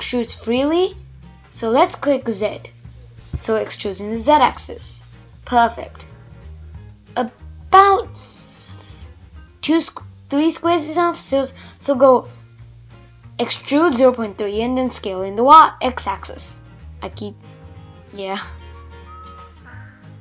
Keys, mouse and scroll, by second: 10.0 middle click, 10.6 scroll down 4, 10.8-12.2 middle drag, 12.2 s, 15.0-18.9 middle drag, 18.9 scroll up 1, 19.2 a, 20.0-20.2 middle drag.